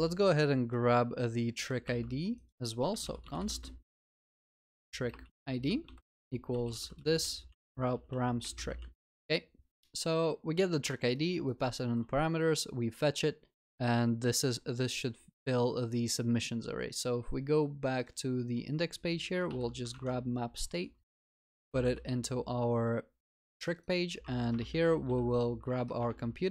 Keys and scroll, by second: 1.8 Tab, 5.9 ctrl+c, 7.3 ctrl+v, 7.6 ctrl+s, 19.5 ctrl+c, 20.0 ctrl+Tab, 21.8 ctrl+v, 22.1 ctrl+s, 26.0 Return.